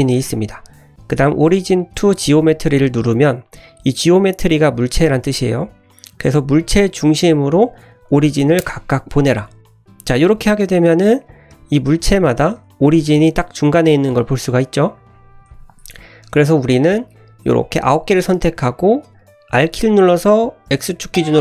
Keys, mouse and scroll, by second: 9.4-10.1 middle drag, 10.3 click, 10.7 middle drag, 11.2 click, 11.5 g, 12.3 click, 12.5 g, 13.4-14.2 middle drag, 14.4 ctrl+z, 14.8 ctrl+z, 15.5 ctrl+z, 15.8 `, 16.4-16.7 drag, 17.0 scroll down 1, 17.1-18.9 middle drag, 19.6 r.